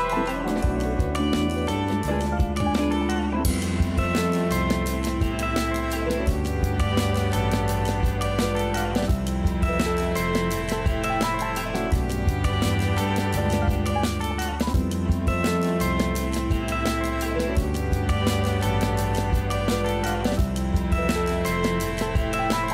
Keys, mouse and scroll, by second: 0.1 a, 0.4 Tab, 0.6 scroll up 1, 0.8 a, 1.0 a, 1.4-1.9 shift+middle drag, 1.9-2.3 scroll up 2, 2.3 shift+middle click, 2.9 scroll up 2, 3.6-5.5 shift+middle drag, 5.5 scroll up 3, 6.1-9.3 shift+middle drag, 9.3-9.9 scroll down 2, 9.9-10.7 middle drag, 10.7-13.7 scroll up 1, 15.3 click, 16.4 click, 21.7-22.5 shift+middle drag, 22.5 scroll up 1.